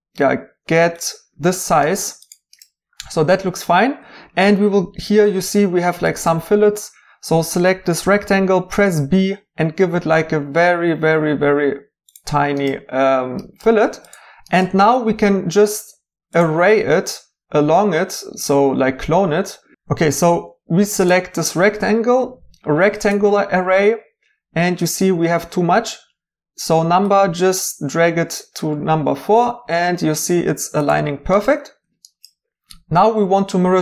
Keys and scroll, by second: 8.0 typing, 15.9 2, 19.7 ctrl+b, 20.1 2.